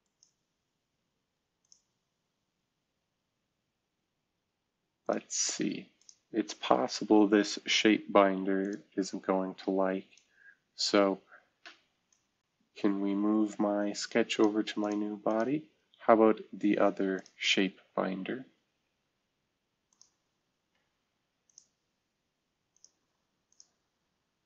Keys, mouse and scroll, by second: 5.0 click, 7.9 Delete, 12.1-14.4 drag, 14.5-16.8 drag, 17.1 click, 17.5 click, 19.0-19.8 scroll up 2, 19.9 click, 21.4 ctrl+click.